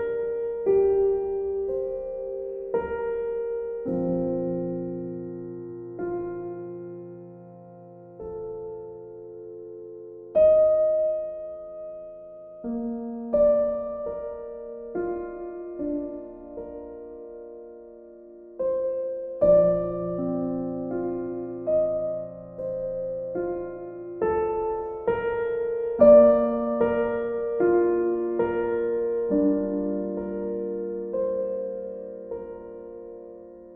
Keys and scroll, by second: 1.4 e, 12.5 b.